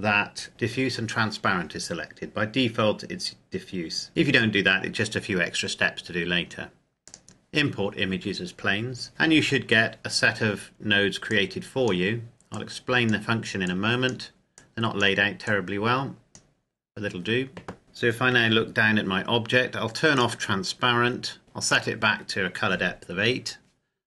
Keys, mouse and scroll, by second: 6.8 click, 11.0 click, 17.8 KP_Decimal, 18.1 KP_7, 19.9 click.